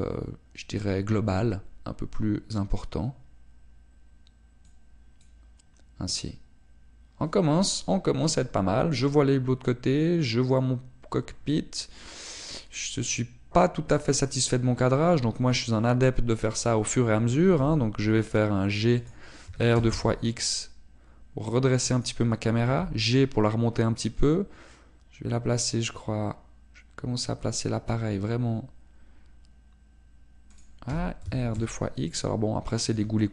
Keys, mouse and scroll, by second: 13.5 click, 17.6 right click, 18.6 g, 20.1 click, 20.5 r, 23.1 click, 23.7 g, 31.7 click, 31.9 r.